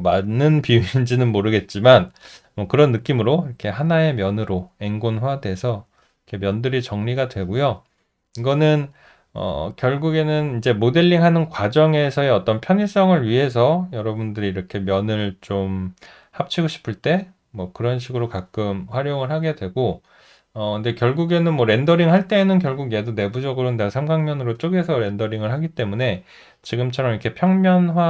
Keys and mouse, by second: 8.0 alt+middle click, 8.9 alt+right click, 9.7 alt+middle click, 27.5 alt+click.